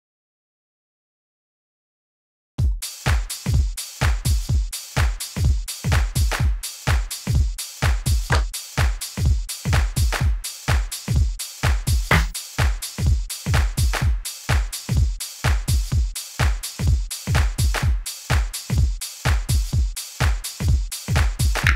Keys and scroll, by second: 10.4 Down, 12.5 Down.